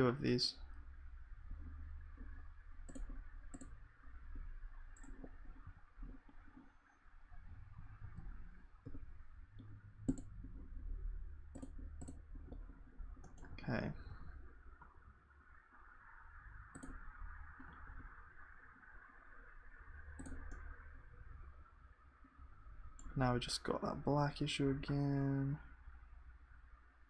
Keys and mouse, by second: 4.3-5.6 drag, 4.3 g, 5.6 a, 8.0 alt+a, 8.8 l, 11.3-17.7 drag, 20.5-22.5 middle drag.